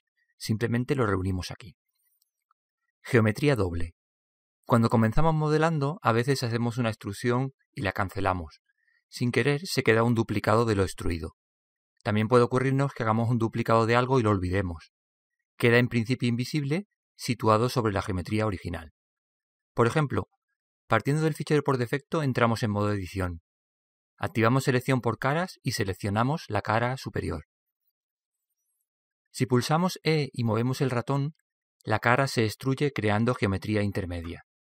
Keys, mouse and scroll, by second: 3.0-6.2 middle drag, 11.8-13.7 middle drag, 23.2 Tab, 25.2-27.1 drag, 26.8-28.6 right drag, 30.3 e.